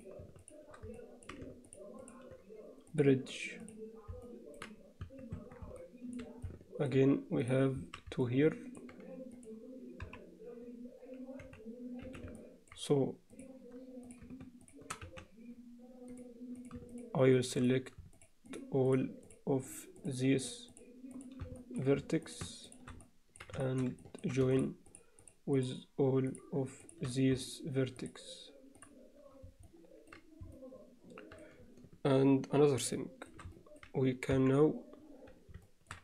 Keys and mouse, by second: 0.5 click, 1.0 middle click, 1.7 shift+click, 3.0 click, 4.3 middle click, 5.1 Tab, 5.4 Tab, 5.8 alt+middle click, 6.5 alt+middle click, 8.3 alt+middle click, 9.4 click, 10.1 KP_1, 11.5 z, 12.1 z, 12.4 alt+middle click, 14.7 shift+click, 15.1 x, 16.6 click, 17.6 click, 18.5 shift+click, 18.9 shift+click, 19.3 shift+click, 19.7 shift+click, 20.0 shift+click, 21.1 shift+click, 21.6 alt+shift+middle click, 22.3 shift+click, 23.1 middle click, 23.7 shift+middle click, 24.1 ctrl+middle click, 24.6 shift+click, 25.6 shift+click, 26.3 shift+click, 28.0-28.9 drag, 29.7 alt+middle click, 30.6 alt+middle click, 33.0 shift+middle click, 33.6 middle click, 34.3 KP_1, 35.7 shift+middle drag.